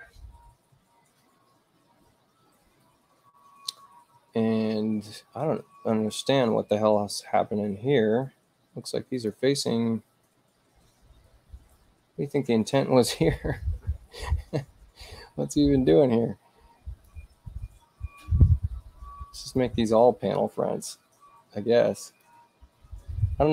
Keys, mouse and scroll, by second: 8.1 space, 9.1 click, 15.9-17.1 drag, 19.5 click, 20.9-22.2 drag.